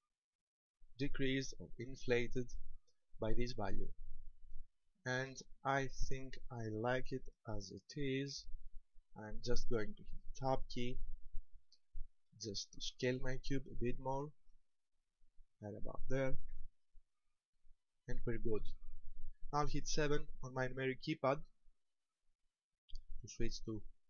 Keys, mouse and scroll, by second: 10.3 Tab, 11.7 shift+middle click, 12.7-13.2 scroll up 3, 14.3 s, 15.7 ctrl+click, 16.6 Tab, 17.4-18.5 scroll down 6, 22.6 KP_7.